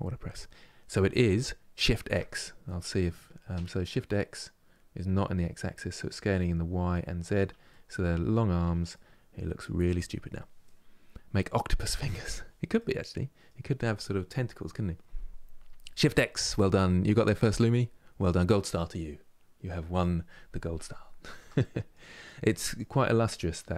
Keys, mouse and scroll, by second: 7.4 middle click, 8.3 Tab, 8.6-15.5 middle drag, 20.2 middle click, 21.1 Tab, 21.3 middle click, 22.1 click, 22.6-23.7 middle drag.